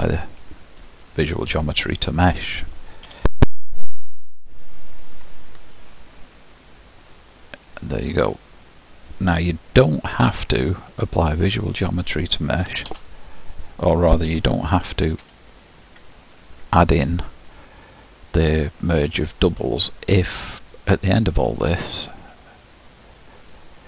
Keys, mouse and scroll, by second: 0.9 ctrl+a, 1.5-2.4 scroll up 1, 2.4 Tab, 3.1 a, 3.7 m, 5.7-6.6 scroll up 1, 6.6-7.8 scroll up 1, 7.8 click, 10.2 Tab, 10.5 Delete, 11.8 click, 12.7 shift+d, 14.4 g, 20.5 click.